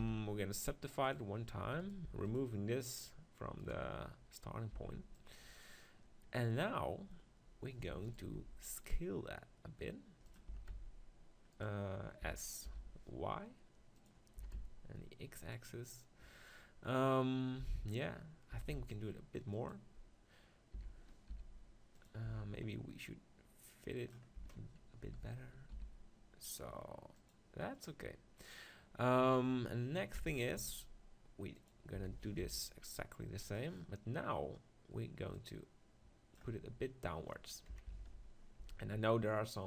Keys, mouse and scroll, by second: 0.0 t, 1.1-2.8 drag, 1.8-5.3 right drag, 2.1 x, 4.7 b, 7.8 e, 8.2-9.7 right drag, 8.4 s, 9.7 click, 10.3-12.2 drag, 10.5 s, 12.3 s, 14.1-17.2 drag, 14.4 s, 17.2 middle click, 18.5 s, 19.7-21.5 drag, 20.7 s, 22.1-25.0 drag, 22.3 Tab, 24.4 Tab, 25.1 s, 27.3-29.2 drag, 30.1 e, 30.6-32.1 right drag, 30.6 s, 31.7-33.4 drag, 32.1 s, 35.5-37.3 drag, 36.5 Tab, 37.3-39.6 middle drag, 37.7 KP_7, 37.9 Tab, 38.1 z, 38.6 z.